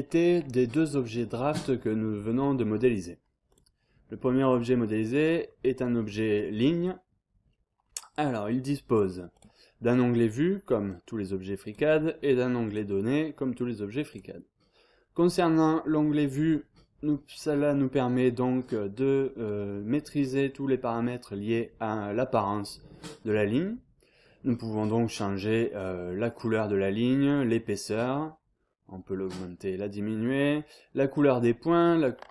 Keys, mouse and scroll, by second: 3.5 click, 9.3 click, 10.9 click, 12.6 click, 14.1 click, 15.9-19.9 drag, 26.3 click, 27.2 click, 28.0-29.0 scroll up 3, 30.7 click.